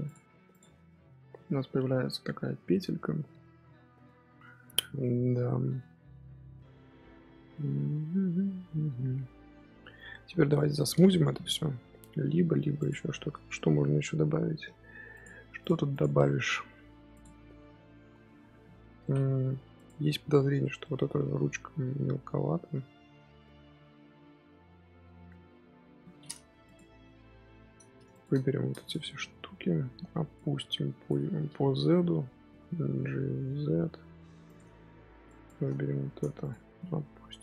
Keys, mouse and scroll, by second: 0.0 click, 0.4 click, 0.6 scroll down 4, 0.8-3.9 middle drag, 9.6-12.7 middle drag, 18.9-19.4 middle drag, 19.4 scroll up 1, 19.7 click, 20.5-21.0 middle drag, 21.0-21.5 scroll up 2, 21.5-24.6 middle drag, 26.6 click, 26.9 KP_1, 28.0 shift+click, 28.7 shift+click, 29.0 Tab, 29.3 z, 29.7 1, 30.3 click, 31.2-32.3 shift+middle drag, 32.3 g, 34.7 Tab, 35.2 click, 36.3 shift+click, 36.8 g.